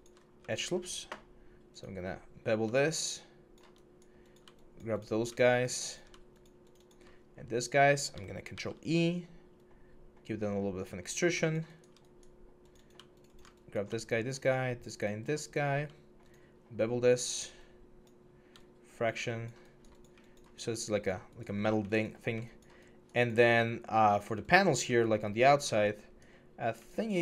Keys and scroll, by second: 0.0 6, 8.3 ctrl+e.